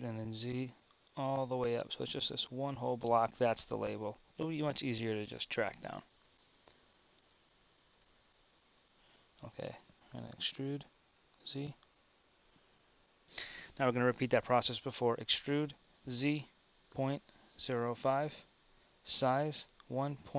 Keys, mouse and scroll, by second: 5.4-6.6 drag, 10.5 e, 15.5 e, 19.2 s.